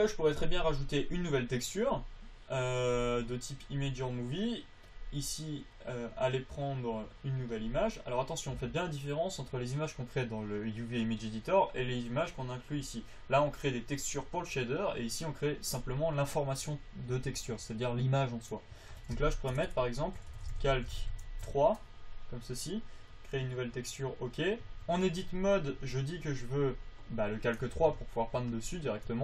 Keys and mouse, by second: 20.0 BackSpace, 20.1 BackSpace, 25.0 Tab, 28.2 Tab.